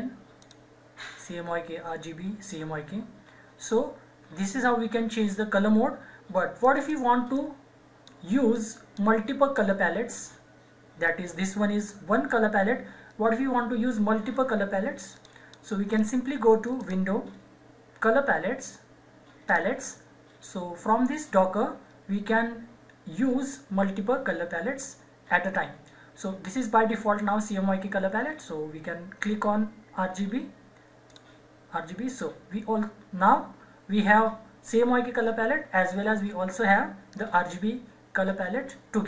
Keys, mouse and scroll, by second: 0.4 click, 6.6-12.5 drag, 15.2 click, 19.5 click, 31.0 click.